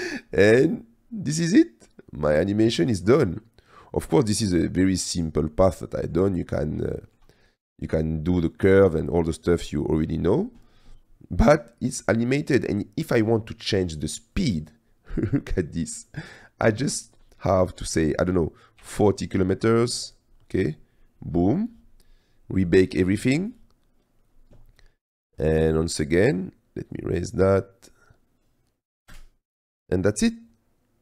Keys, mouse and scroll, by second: 0.0-3.1 drag, 4.5 space, 5.0 click, 5.8-6.2 drag, 7.0-7.3 shift+middle drag, 8.8 click, 14.4-20.2 drag, 23.2 click, 27.0 click, 28.1 click, 29.2 space.